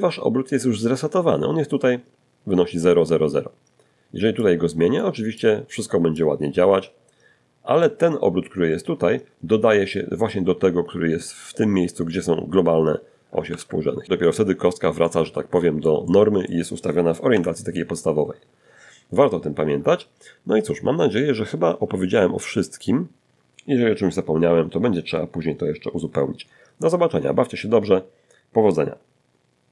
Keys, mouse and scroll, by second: 2.6 click, 3.6 click, 4.4-6.2 drag, 11.7 alt+r, 13.9 middle click, 15.5 1, 29.6 q.